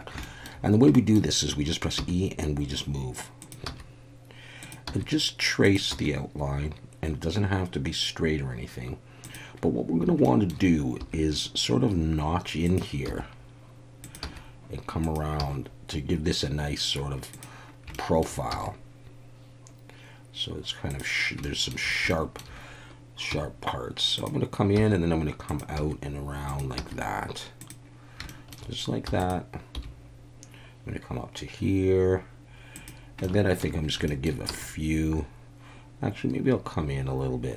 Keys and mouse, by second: 0.2 shift+middle click, 0.9 shift+middle click, 3.4 click, 3.6 e, 4.6 click, 5.6 click, 5.9 e, 9.2 click, 10.2 shift+middle click, 11.0 e, 12.7 click, 13.1 e, 14.0 click, 14.2 e, 15.0 click, 15.4 e, 17.3 click, 17.9 shift+middle click, 18.5 e, 20.9 click, 21.4 shift+middle click, 22.1 shift+middle click, 23.3 g, 24.1 click, 24.8 e, 25.5 click, 25.8 e, 26.5 click, 27.6 click, 28.3 shift+middle click, 29.1 e, 29.7 g, 32.7 click, 33.2 shift+middle click, 34.1 shift+middle click, 34.5 e.